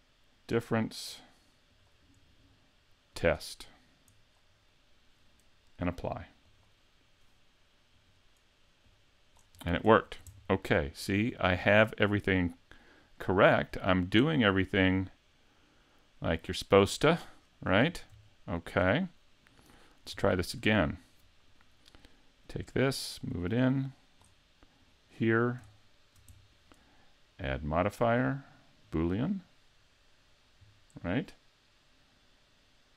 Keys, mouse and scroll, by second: 1.7 click, 4.7 middle click, 6.5 click, 8.0 right click, 8.8 click, 9.6 scroll up 3, 9.9 shift+middle click, 10.3 middle click, 11.1 right click, 11.4 middle click, 13.7 scroll up 3, 14.3 middle click, 16.4-17.1 scroll down 8, 17.2 shift+middle click, 17.9-18.3 scroll down 1, 18.3 shift+middle click, 19.8 middle click, 20.3 shift+middle click, 20.7 middle click, 21.5 right click, 22.8 click, 24.8 right click, 25.2 middle click, 25.7 shift+middle click, 26.4 middle click, 27.5 click.